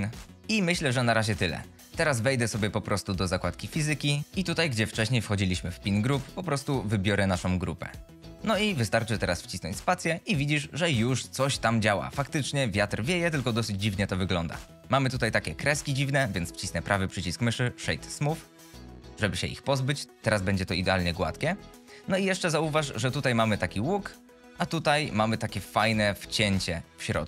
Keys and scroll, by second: 0.4 Tab, 4.4 F22, 8.5 F22, 9.1 space.